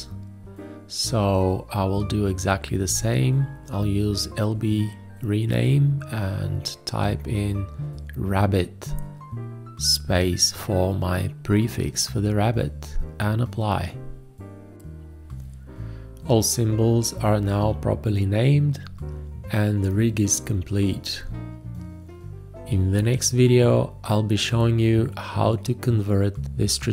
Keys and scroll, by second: 5.2 alt+l, 10.8-12.7 typing.